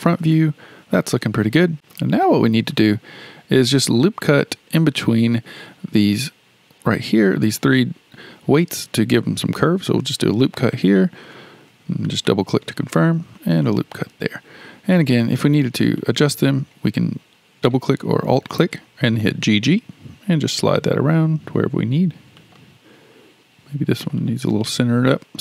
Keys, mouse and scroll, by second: 0.3-5.8 shift+middle drag, 9.9 ctrl+r, 11.7 ctrl+r, 13.1 ctrl+r, 15.8 click, 16.0 click, 19.3 g, 24.0 click, 24.2 click.